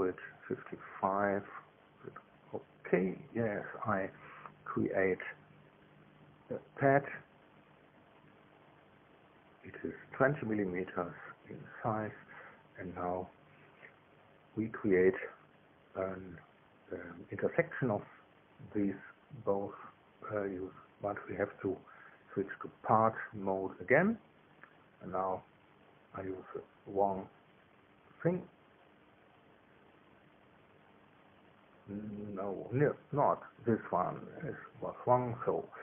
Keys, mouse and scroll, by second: 1.6 click, 4.3 click, 7.5 click, 9.9 KP_2, 10.0 KP_0, 10.6 KP_Enter, 14.6-16.2 drag, 16.8 click, 17.9 click, 20.3 shift+click, 22.6 click, 23.9 click, 29.0 click, 30.7 shift+click, 32.6 click, 35.0 ctrl+z.